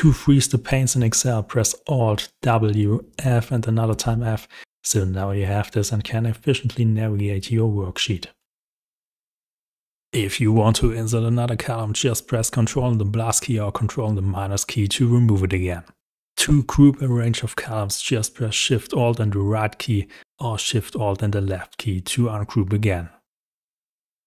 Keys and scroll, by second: 9.6 ctrl++, 16.0 alt+shift+Tab, 23.6 ctrl+1.